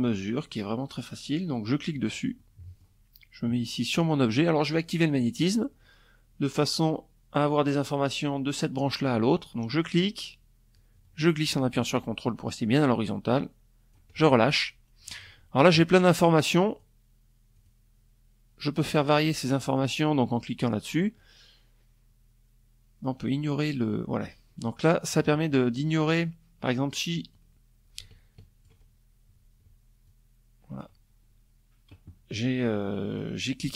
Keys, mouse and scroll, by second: 0.5 click, 0.9 click, 3.7 click, 9.3-12.6 drag, 15.2 click, 16.1 click, 17.6 click, 18.2 click, 25.8-27.4 drag, 28.6 ctrl+click, 31.7-33.2 drag.